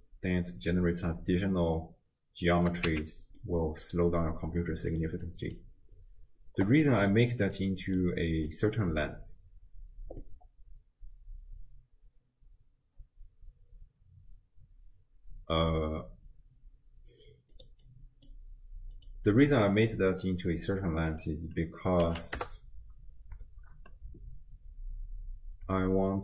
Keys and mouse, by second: 2.9 x, 3.4 middle click, 4.9 click, 5.3 click, 6.9 middle click, 7.6 click, 8.5 click, 17.6 click, 17.9 click, 19.0-22.5 drag, 23.5 shift+space, 25.8 space.